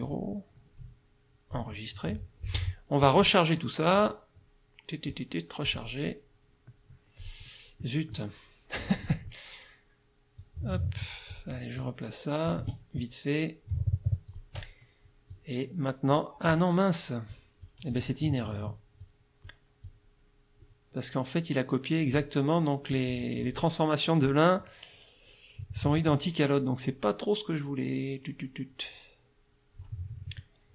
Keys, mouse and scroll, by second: 0.0 click, 1.5 click, 3.2 click, 5.7 click, 7.2 click, 7.8 click, 9.0 click, 10.4-11.5 drag, 11.8 click, 12.7 F2, 14.3 click, 15.3-16.7 drag, 17.3 click, 17.9 click, 19.0 click, 19.8-22.4 drag, 23.0 click, 24.3-30.0 drag.